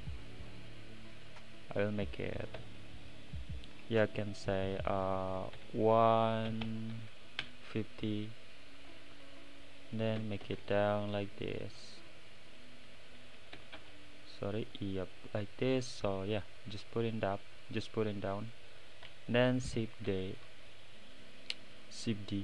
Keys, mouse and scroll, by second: 2.6-5.8 drag, 12.1-16.8 right drag, 12.1 middle click, 16.8 click.